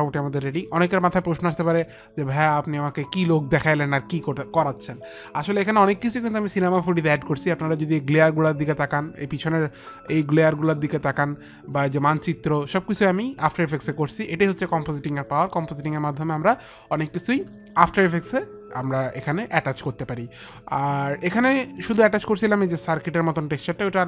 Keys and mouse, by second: 2.1 click.